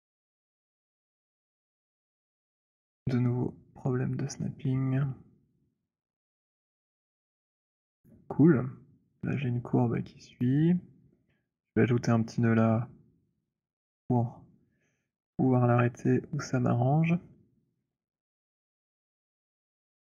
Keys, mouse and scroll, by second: 0.1-1.7 c, 1.9 middle click, 1.9 c, 3.0 middle click, 4.4-8.0 typing, 8.0 middle click, 10.4 click, 13.7 alt+middle click, 20.0 right click.